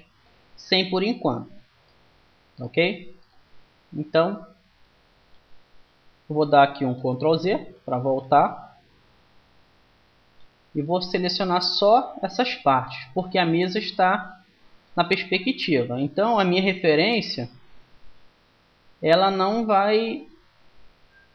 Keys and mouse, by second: 0.7-1.8 middle drag, 2.5-4.4 middle drag, 6.8 KP_1, 8.0 ctrl+z, 8.7 ctrl+z, 10.9-14.5 drag, 14.5 middle click, 15.0-16.8 drag, 18.4 Tab, 19.1-21.0 middle drag, 20.5 z, 21.0 click.